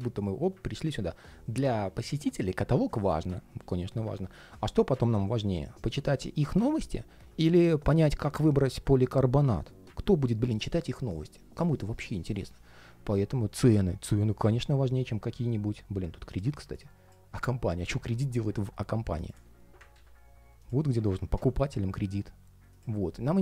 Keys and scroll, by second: 17.4 super+x, 19.7 super+v.